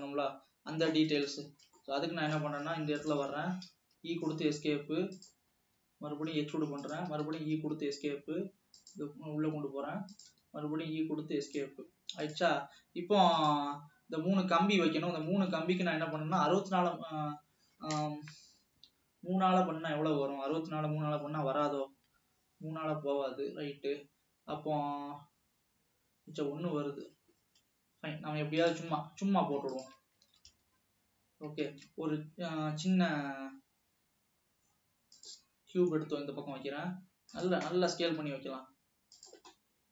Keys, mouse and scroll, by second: 0.0 scroll down 2, 0.3-1.7 middle drag, 1.7 scroll up 2, 2.0 middle click, 3.0 click, 4.0 e, 4.5 s, 5.6 scroll up 1, 6.1 e, 7.3 e, 8.3 s, 9.7 s, 10.8 e, 13.5 e, 15.9 alt+a, 16.5 ctrl+s, 28.8 drag, 29.3 shift+s, 30.7 alt+a, 32.0 shift+a, 36.3-36.8 scroll down 5, 36.8 s, 37.9 scroll up 3, 38.5 s, 39.8 scroll up 4.